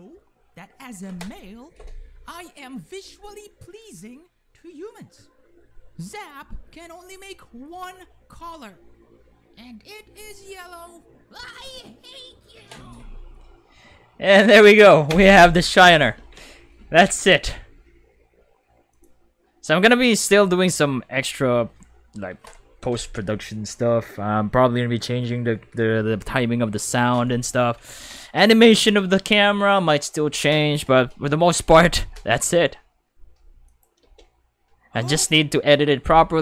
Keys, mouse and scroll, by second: 15.0 space, 15.2 5, 18.9 click, 21.1-21.5 shift+middle drag, 28.7 ctrl+s, 33.7 click, 34.0 space, 35.0 space.